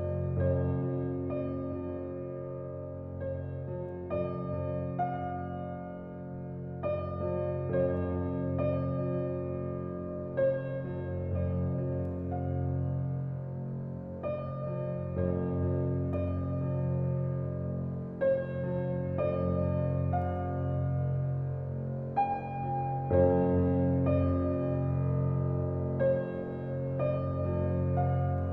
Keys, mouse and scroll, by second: 0.5 click, 3.1 right click, 8.0-12.9 right drag, 12.9 click, 18.8 click, 22.6 Delete, 23.9 click, 25.3 alt+right click, 25.6 alt+click.